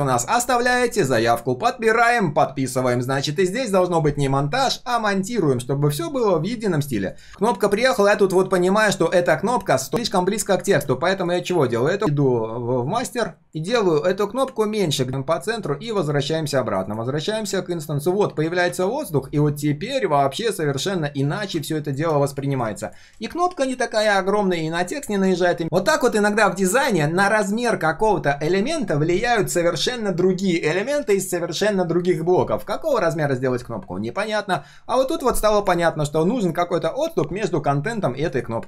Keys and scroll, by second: 15.1 alt+h, 15.1 alt+v, 25.4 ctrl+z.